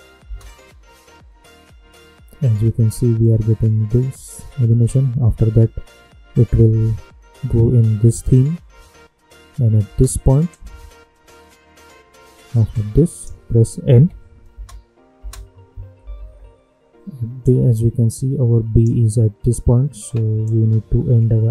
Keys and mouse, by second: 0.2 space, 9.8 space, 10.4-13.8 drag, 13.8 n, 14.5 space, 16.0 =, 16.2 =, 17.4-21.5 drag.